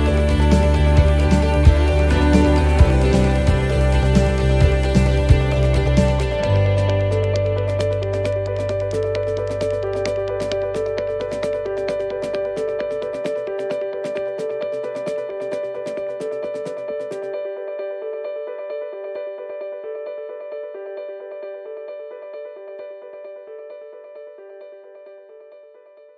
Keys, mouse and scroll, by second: 2.9 middle click, 2.9 click, 4.2 middle click, 5.4 click, 7.2 click, 13.3 middle click, 14.7 click, 17.4 shift+d, 18.7 click, 22.7 click, 22.7 middle click, 23.9 click, 25.4 shift+d.